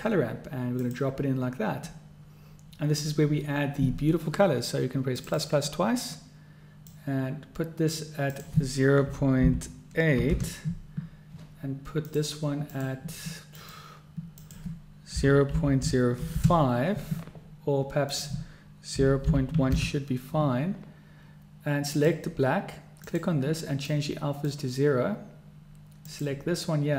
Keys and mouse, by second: 5.5 click, 7.1-8.1 drag, 8.5-11.2 drag, 12.2 click, 12.8-13.9 drag, 14.6-17.3 drag, 18.2-20.6 drag, 22.1 click, 23.2 click, 26.2 click.